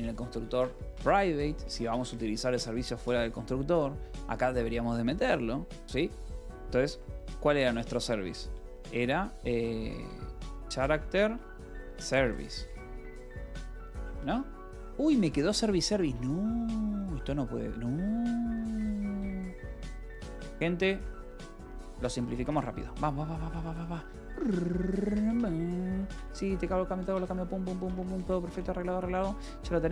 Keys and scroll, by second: 0.0-2.0 typing, 6.6-8.0 typing, 9.5-14.2 typing, 14.7 Return, 15.0 Escape, 15.2-17.0 typing, 18.1-23.2 typing, 24.4-29.9 typing, 24.9 Escape, 27.0 Return.